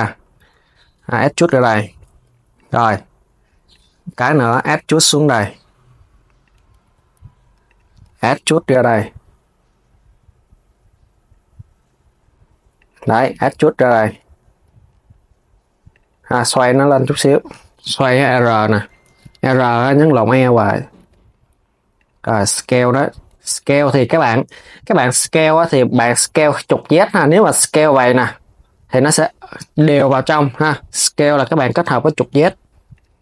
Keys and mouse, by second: 3.4 click, 3.7 KP_3, 4.3 e, 17.2 z, 18.8 z, 24.6 click, 27.0 s, 29.6 z, 32.8 KP_3.